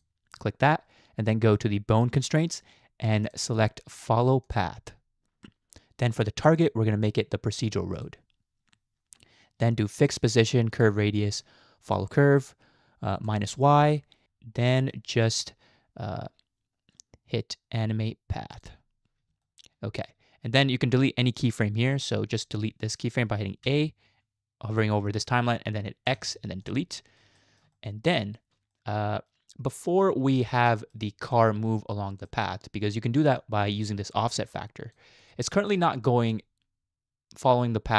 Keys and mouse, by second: 2.1 click, 3.4-4.6 drag, 9.9 click, 10.7 click, 11.9 click, 13.2 click, 14.7 middle click, 18.6 click, 19.4-20.1 shift+middle drag, 22.1 click, 23.6 a, 26.1 x, 27.4 shift+middle click, 27.8 middle click, 28.8-29.3 shift+middle drag, 30.7 shift+middle click, 33.5-34.9 drag, 35.5 shift+middle click, 36.4-37.9 drag.